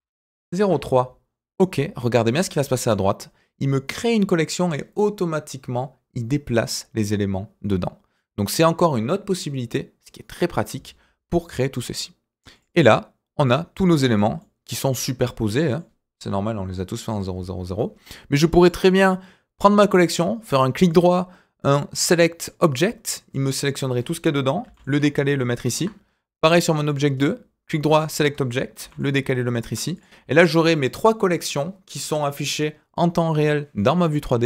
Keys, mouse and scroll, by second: 12.5 click, 13.4 click, 14.1 click, 14.4-15.7 middle drag, 18.6 click, 20.1-22.4 right drag, 24.2-24.6 scroll down 1, 24.6 g, 26.5 click, 26.8 click, 27.1 right click, 28.8 g, 29.9 click, 30.2 scroll down 1, 30.4-30.8 middle drag, 31.0-31.5 middle drag.